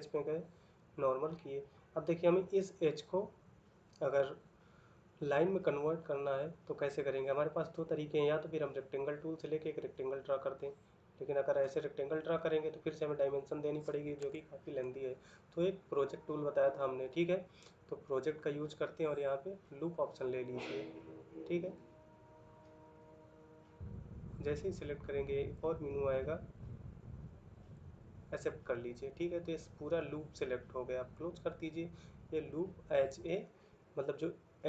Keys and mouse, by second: 13.9 Escape.